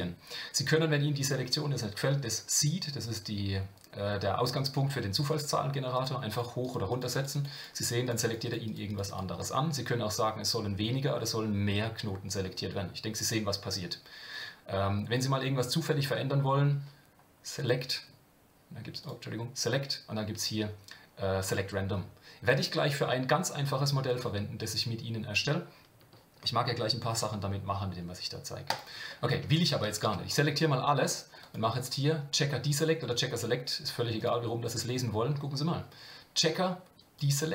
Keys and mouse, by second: 5.9 click, 6.3 click, 6.6 click, 6.9 click, 7.2 click, 8.0 click, 8.4 click, 8.6 click, 9.1 click, 9.7-15.1 drag, 17.6-18.8 drag, 19.0-28.3 drag, 28.7 click, 31.4-34.3 drag, 37.0-37.5 drag.